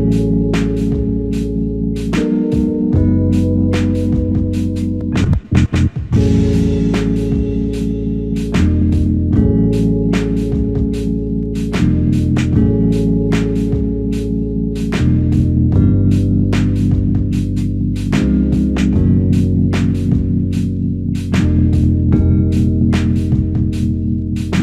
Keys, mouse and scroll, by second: 0.7 ctrl+right click, 4.4 right click, 9.6 f, 12.2 alt+click, 21.7 ctrl+i, 23.4-23.9 typing.